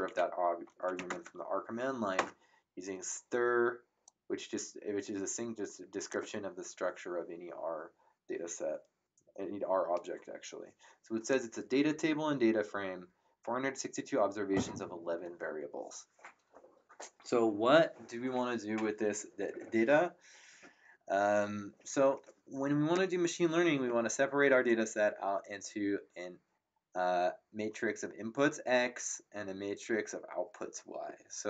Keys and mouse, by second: 0.0-0.9 typing, 1.1 Tab, 2.1 Return, 4.0 click.